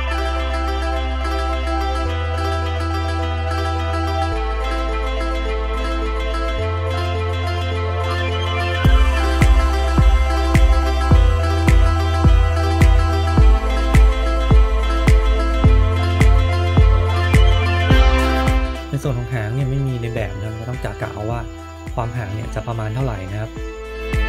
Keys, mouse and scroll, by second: 4.6 middle click, 4.8 middle click, 6.2 middle click, 6.9 shift+middle click, 6.9 scroll down 2, 7.0 shift+middle click, 7.3 click, 7.4 middle click, 8.0 g, 8.8 middle click, 9.4 shift+middle click, 9.8 click, 10.0 click, 10.0 middle click, 10.2 middle click, 10.3 shift+middle click, 10.9 KP_1, 11.3 click, 12.1-12.8 scroll up 1, 16.4 scroll down 2, 16.5 middle click, 16.6 middle click, 16.9-17.4 scroll up 4, 17.0 middle click, 17.2 shift+middle click, 17.4 middle click, 18.3 shift+middle click, 20.0-20.7 scroll down 2, 20.4 middle click, 22.5-23.0 scroll up 1, 23.0 scroll up 2, 23.8 middle click, 23.8 click, 24.0 ctrl+click.